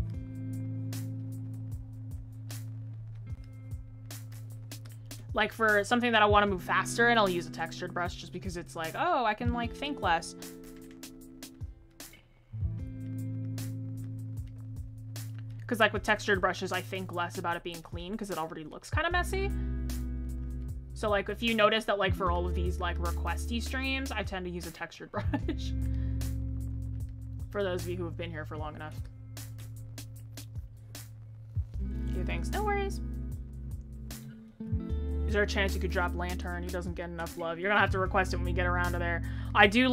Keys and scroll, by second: 1.6 ctrl+z.